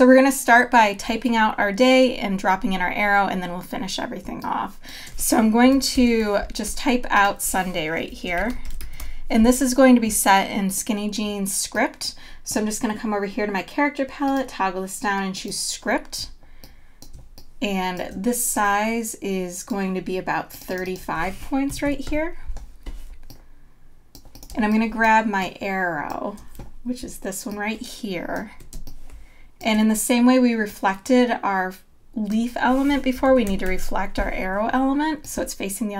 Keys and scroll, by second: 4.2 space, 6.0 super+=, 6.7 t, 9.5 y, 17.1 space, 21.7 KP_3, 22.0 Page_Up, 24.5 space, 28.8 space, 33.5 super+=.